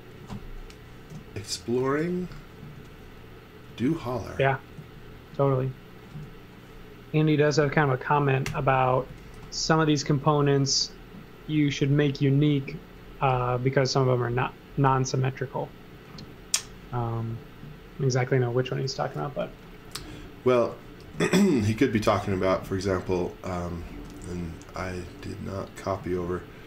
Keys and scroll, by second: 1.1-6.1 typing, 7.1 space, 8.4 h, 9.1 x, 9.3 v, 10.0 z, 11.5 x, 11.8 v, 15.9 space, 19.1-21.6 typing, 22.7 space, 23.9 x, 24.5 x, 26.0 z, 26.5 space.